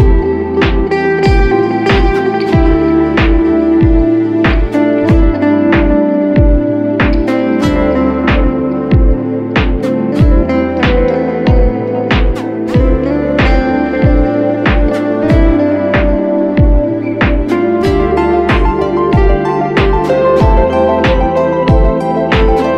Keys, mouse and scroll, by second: 1.8 double click, 5.4-6.9 typing, 10.3 typing, 11.8-12.5 typing, 21.8 double click.